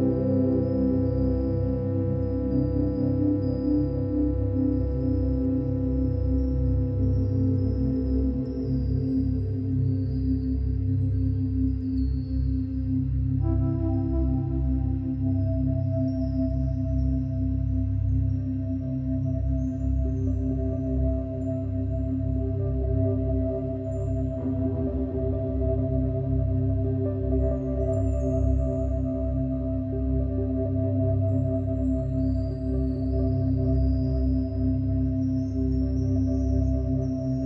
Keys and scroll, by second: 16.7 typing, 17.2 Return, 22.3-22.8 typing, 22.9 Return, 31.0 ctrl+z.